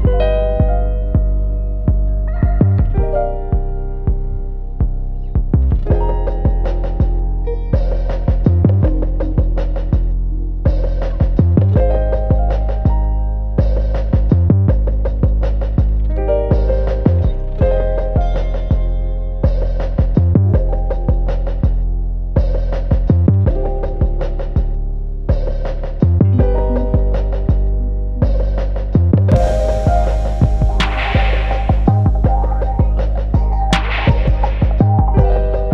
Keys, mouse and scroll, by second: 0.5 ctrl+click, 0.9 x, 1.0 `, 4.2 ctrl+z, 4.4-6.4 typing, 8.6 `, 9.1 Tab, 9.6 scroll up 1, 9.8 `, 10.4 alt+click, 11.2 `, 11.7 scroll up 1, 11.8 `, 12.9 click, 13.2 shift+click, 13.7 click, 14.0 shift+click, 14.3 x, 14.6 `, 15.4 Tab, 16.6 KP_Divide, 16.8 alt+a, 17.0 `, 18.2 click, 18.6 `, 19.4 shift+click, 19.7 `, 20.0 click, 20.5 shift+click, 20.9 ctrl+j, 21.4 Tab, 21.6 a, 23.2-24.2 right drag, 23.6 alt+a, 24.2 click, 24.9 `, 25.2 Tab, 25.8 click, 26.0 `, 27.6 click, 28.6 scroll up 1, 29.1 3, 29.4 click, 29.6 `, 30.8 ctrl+click, 32.0 g, 34.2 `, 35.0 scroll up 1, 35.1 1, 35.3 `.